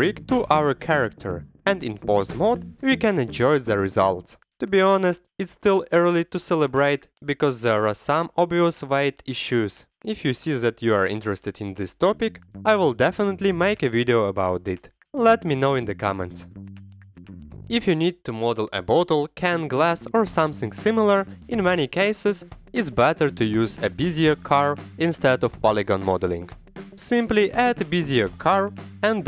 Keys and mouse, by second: 0.0 click, 0.3 ctrl+Tab, 0.5 middle click, 0.6 g, 0.9 Escape, 0.9 middle click, 1.0 g, 1.2 Escape, 1.3-1.6 middle drag, 1.7 click, 2.2-2.8 drag, 2.9 middle drag, 3.1 shift+click, 3.6-5.8 typing, 3.9 Escape, 4.3 click, 4.7 Escape, 5.2 click, 5.7 Escape, 6.1 ctrl+Tab, 6.1 alt+z, 6.6 ctrl+click, 7.2 click, 7.2 right click, 7.8 ctrl+click, 8.0 ctrl+click, 8.9 click, 8.9 middle click, 8.9 right click, 9.5 ctrl+Tab, 10.2 alt+z, 10.3 drag, 10.3 middle drag, 10.3 right drag, 11.5 Escape, 11.5 g, 11.8 click, 11.8 middle click, 11.8 right click, 12.2 drag, 12.5 r, 13.0 Escape, 13.2 g, 13.9 drag, 14.6 g, 14.8 Escape, 14.9 click, 15.0 g, 15.8 Escape, 16.0 click, 16.1 g, 16.7 r, 17.3 click, 17.5 shift+a, 19.0 middle click, 19.1 Tab, 19.2 3, 19.4 x, 19.8 middle click, 19.9 click, 20.0 Tab, 20.3 Tab, 20.3 x, 20.5 Tab, 20.6 click, 20.9 ctrl+1, 21.1 click, 21.1 Tab, 21.4-26.3 typing, 21.7 click, 22.7 click, 24.4 click, 24.6 ctrl+r, 25.6 click, 26.2 click, 26.4 click, 26.6 alt+z, 26.8 alt+z, 27.3-29.0 typing, 27.5 click, 28.5 click, 28.7 click, 29.0 click.